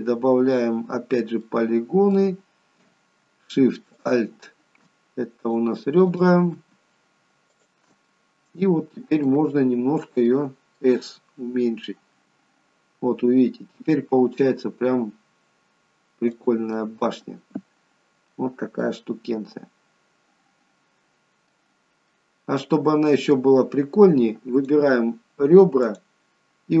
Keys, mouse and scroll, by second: 1.5 middle click, 4.1 alt+shift+click, 5.5 click, 6.1 click, 6.6 alt+shift+click, 7.6 alt+shift+click, 7.9 alt+shift+click, 8.1 middle click, 9.6-10.3 scroll down 2, 10.3 middle click, 12.3 s, 16.8 middle click, 18.9 middle click, 21.8-24.6 scroll up 3, 22.2 middle click, 24.7 click, 25.9 click.